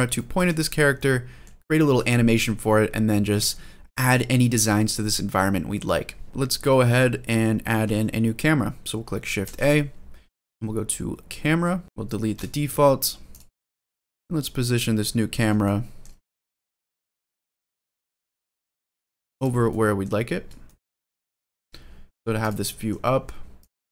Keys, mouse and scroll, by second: 0.7 middle click, 2.4-2.7 scroll down 2, 3.0 middle drag, 6.1 scroll up 1, 6.3 click, 6.4-7.2 scroll down 4, 7.1-8.2 scroll up 2, 9.2 shift+a, 11.8 click, 12.1 BackSpace, 13.1 click, 13.7-15.2 middle drag, 15.4-15.8 shift+middle drag, 16.0-16.3 middle drag, 16.4 shift+middle drag, 16.9-17.2 middle drag, 17.4-17.9 middle drag, 18.0 g, 19.1 click, 19.5-19.8 middle drag, 20.0 scroll up 2, 20.4 shift+middle drag, 21.0-21.4 middle drag, 21.5 scroll down 1, 21.8 g, 22.2 drag, 22.4-22.8 middle drag, 22.8 g, 23.3 click.